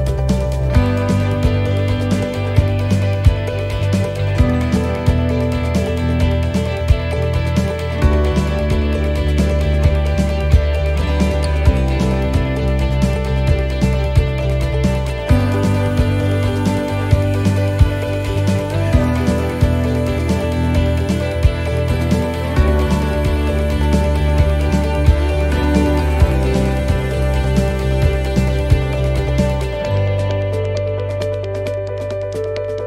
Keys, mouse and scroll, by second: 2.0 middle click, 2.5 scroll down 3, 2.9 middle click, 5.3 middle click, 6.2-6.6 scroll down 1, 6.6 middle click, 8.2 l, 9.3 l, 10.1 middle click, 10.1 l, 11.1 shift+d, 12.4 r, 15.7 click, 16.6 middle click, 18.5 click, 18.5 middle click, 21.4 middle click, 26.1-26.8 scroll up 2, 26.6 middle click, 27.5 right click, 28.6 l, 29.3 l, 29.6 l, 30.4 shift+d, 31.8 r.